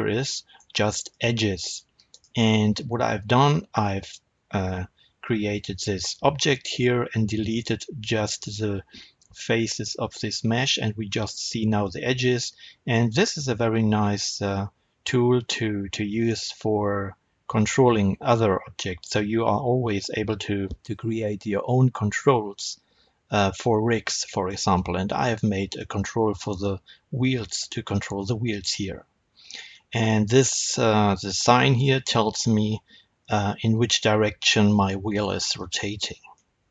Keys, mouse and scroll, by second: 0.7 Tab, 1.0 click, 1.6 click, 2.0 click, 3.7 Tab, 12.1-29.6 middle drag, 29.6-32.7 scroll up 1, 32.8 r, 35.6 right click, 36.3-36.7 middle drag.